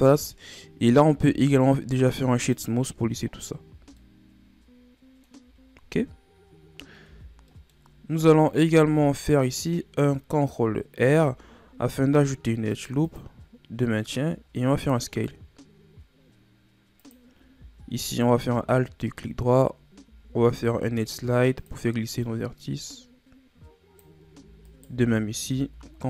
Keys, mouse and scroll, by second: 0.1-1.1 scroll up 2, 1.1 w, 3.3-3.7 scroll down 4, 3.7 a, 4.0-5.5 middle drag, 5.5-5.9 shift+scroll down 2, 5.9-6.5 scroll up 1, 6.5-7.0 scroll up 1, 7.0 Tab, 7.5 middle click, 7.8 scroll up 1, 8.1 Tab, 8.6 Tab, 11.0 ctrl+r, 14.2 s, 18.0 alt+right click, 20.0 ctrl+e, 24.7 alt+right click, 25.5 ctrl+e.